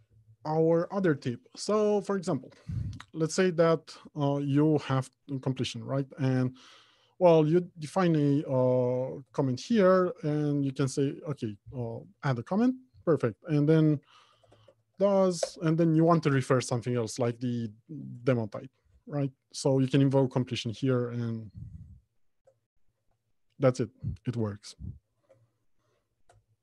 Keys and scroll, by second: 9.6 alt+Return, 15.7 ctrl+space, 18.3 Return, 25.6 alt+Home, 26.1 Left, 26.5 Return.